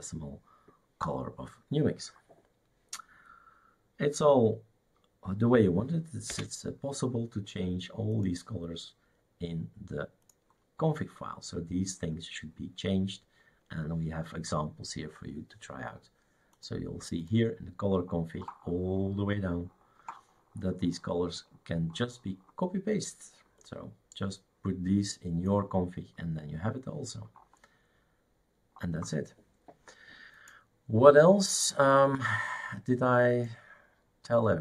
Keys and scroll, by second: 6.3 Escape.